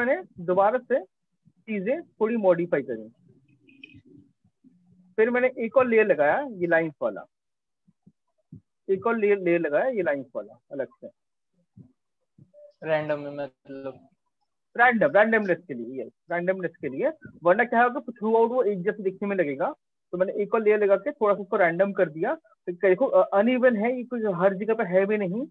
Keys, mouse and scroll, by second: 0.1 click, 0.3 click, 1.8 click, 2.7 click, 4.6 click, 5.7 click, 6.5 click, 7.1 ctrl+space, 7.2 ctrl+click, 7.4-25.5 ctrl+click, 7.6-8.2 ctrl+space, 8.8 click, 9.9 click, 10.9 click, 12.2 ctrl+-, 12.6 ctrl+-, 13.0 ctrl+-, 13.9 click, 14.5 click, 14.7 click, 14.8 click, 14.9-16.5 click, 16.9 click, 16.9 click, 17.1 click, 17.1 click, 17.2 click, 17.3 click, 17.5 click, 17.5 click, 17.7 click, 18.1 ctrl+click, 19.1 click, 20.0 click, 21.7 click, 22.9-23.7 click, 22.9 click, 24.0-24.5 click, 24.6 click, 24.8 click, 25.1 click.